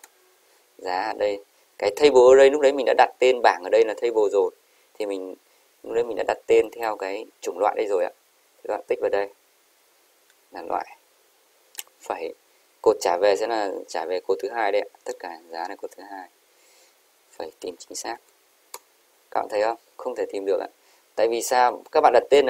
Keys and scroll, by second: 18.2-18.8 typing, 19.4 Up.